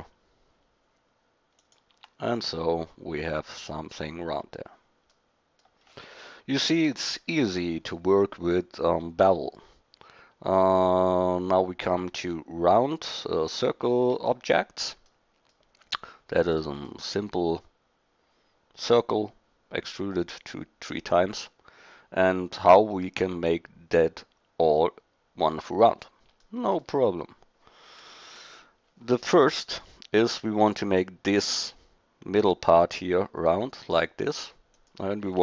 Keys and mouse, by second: 1.9 Tab, 7.0 drag, 14.5-15.9 middle drag, 16.6 middle drag, 25.9-26.5 middle drag, 28.3 KP_1.